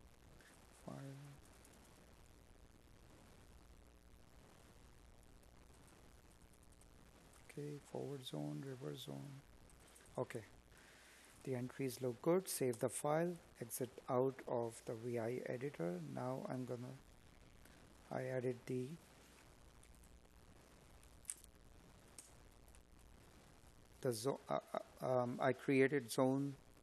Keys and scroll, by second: 2.1 space, 5.5 space.